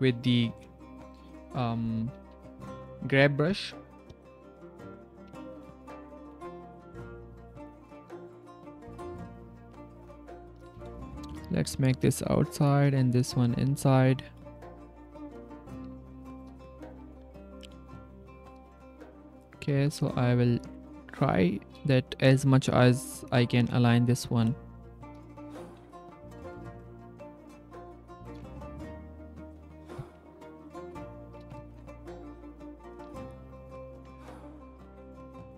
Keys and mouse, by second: 3.5 ctrl+g, 4.1-6.2 typing, 6.8-8.0 drag, 8.4 click, 8.9 click, 9.2 click, 9.2 middle click, 9.2 right click, 9.5-10.5 drag, 9.5 c, 10.7 middle click, 11.2 middle click, 11.5 c, 12.1 click, 13.0 middle click, 13.5 middle click, 14.1-15.3 drag, 15.6 click, 15.8 Tab, 16.0 click, 16.6 click, 16.8 g, 18.6 drag, 19.2 click, 19.6 g, 20.7 click, 22.5 Tab, 22.8 click, 23.6-25.1 drag, 25.3 click, 26.4 click, 26.8 click, 27.3 c, 27.8 click, 28.5 click, 29.0 click, 30.6 ctrl+click, 32.9 click, 33.0 ctrl+c, 34.3 click, 35.2 ctrl+click, 35.5 ctrl+c.